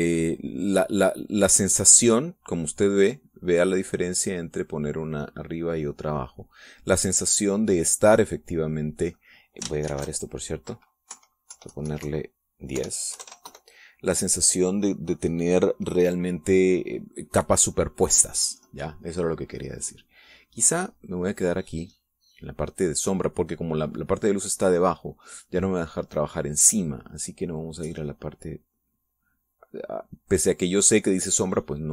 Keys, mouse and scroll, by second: 1.0-2.2 drag, 3.4-4.9 drag, 5.5 click, 6.5 click, 10.9 ctrl+shift+s, 12.1 Right, 12.5 Left, 13.8 BackSpace, 14.1 KP_1, 14.5 KP_Enter, 21.9 click, 27.8-31.9 drag.